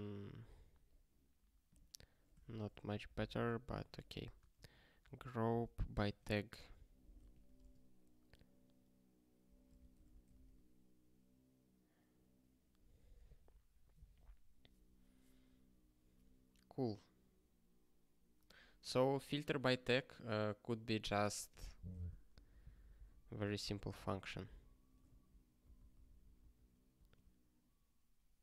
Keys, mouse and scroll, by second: 1.6 click, 2.4-4.3 typing, 5.0 ctrl+n, 5.5 Return, 6.0 alt+shift+s, 7.1 alt+f, 7.5 space, 9.7 BackSpace, 10.0 ctrl+s, 10.6 ctrl+k, 22.3 alt+b, 22.4-23.5 alt+b, 23.7 alt+b, 23.9 alt+b, 25.1 ctrl+n, 25.6 ctrl+b, 25.7 ctrl+b.